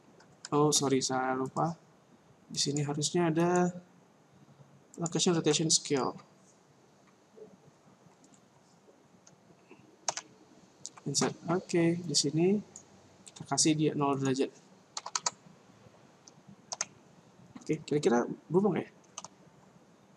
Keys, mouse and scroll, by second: 1.5 click, 2.8 click, 12.0 click, 14.1 click, 16.7 i, 19.0 alt+a.